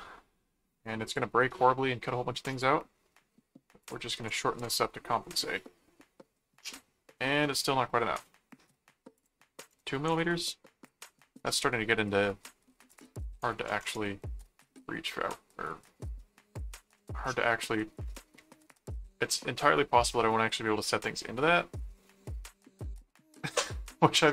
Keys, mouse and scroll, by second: 1.0 click, 2.5 click, 3.8 click, 6.7 middle click, 9.1 click, 11.6 middle click, 12.9 click, 15.3 middle click, 16.2 middle click, 17.0 middle click, 18.9-20.0 middle drag, 20.2-23.7 middle drag.